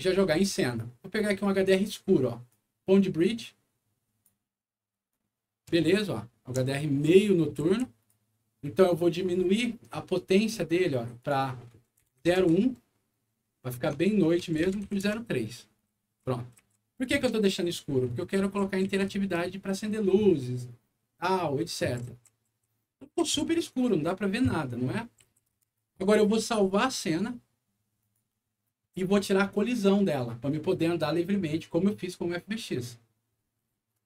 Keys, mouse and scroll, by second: 2.5-4.2 drag, 5.1-8.0 right drag, 5.9 d, 6.8 a, 7.6 s, 10.0-10.6 scroll up 2, 11.2 click, 12.0 KP_0, 12.0 KP_Decimal, 12.2 KP_1, 12.4 Return, 13.7 Tab, 14.6 KP_0, 14.7 KP_Decimal, 14.8 KP_3, 15.0 Return, 15.7-17.0 right drag, 15.9 a, 17.8-23.3 right drag, 18.1-19.7 typing, 21.7-23.0 typing, 23.8-25.7 right drag, 25.2 s, 25.5 d, 26.6 click, 28.0 click.